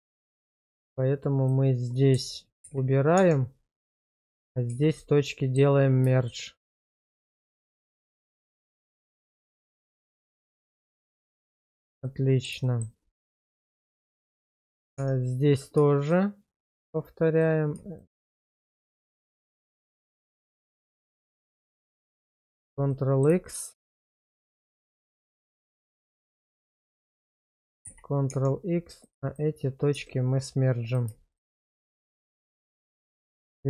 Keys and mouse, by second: 0.1 shift+click, 1.4 shift+click, 2.6 ctrl+x, 3.1 Tab, 4.0 click, 4.7 1, 5.3 middle click, 6.2 shift+click, 7.5 1, 8.5 ctrl+z, 9.1 click, 9.5 shift+click, 9.9 1, 10.4 middle click, 11.3 shift+middle click, 12.0 middle click, 12.6 shift+middle click, 14.0 Tab, 14.9 Tab, 15.5 click, 22.5 ctrl+x, 22.9 middle click, 23.5 shift+middle click, 24.2 middle click, 26.3 shift+click, 26.9 shift+click, 27.8 ctrl+x, 28.3 Tab, 29.9 1, 31.6 1, 32.1 middle click, 32.7 shift+middle click.